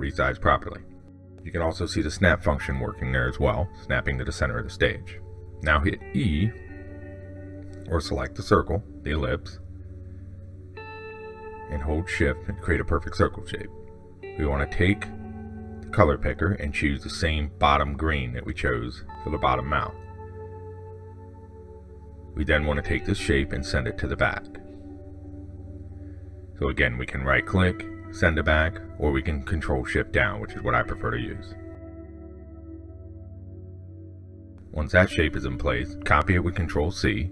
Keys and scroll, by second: 29.7 ctrl+shift+Down, 35.3 ctrl+c, 36.1 ctrl+v.